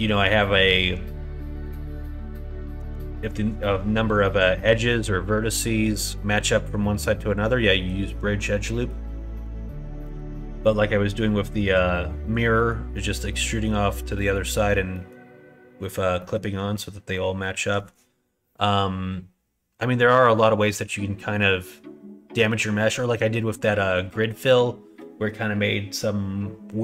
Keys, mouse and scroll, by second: 4.5 middle click, 5.2 middle click, 7.7 middle click, 8.6 middle click, 9.9 middle click, 10.7 middle click, 12.5 middle click, 13.3 middle click, 14.1 middle click, 14.9 middle click, 16.2 middle click, 20.9 middle click.